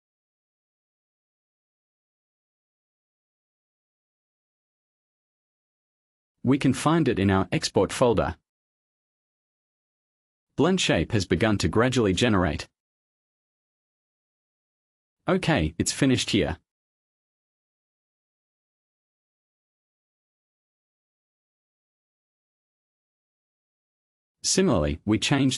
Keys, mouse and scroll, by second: 2.7 scroll up 1, 3.4-4.7 scroll up 4, 6.0 click, 6.8-7.3 scroll up 1, 7.4-7.8 scroll down 1, 7.9-10.0 scroll down 9, 11.9 click, 12.6 click, 15.6-16.0 scroll down 1, 16.2-17.0 scroll down 4, 18.5-19.5 scroll up 1, 19.9 scroll up 1, 21.9 click, 22.7 click, 23.8 click, 25.0 click.